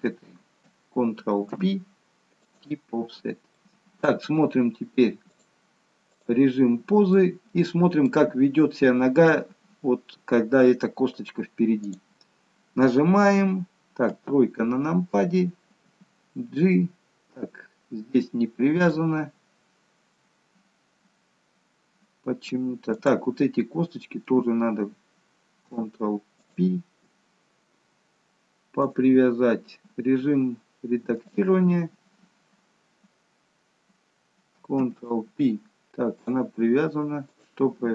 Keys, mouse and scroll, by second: 2.6 ctrl+p, 2.9-3.5 scroll down 2, 3.5 middle click, 5.3 click, 7.1 middle click, 8.8-9.6 scroll up 2, 11.8 click, 14.1 KP_3, 15.8 g, 20.2 middle click, 23.0 click, 23.3 middle click, 26.3 shift+click, 28.8 click, 34.7 ctrl+p, 37.2 click.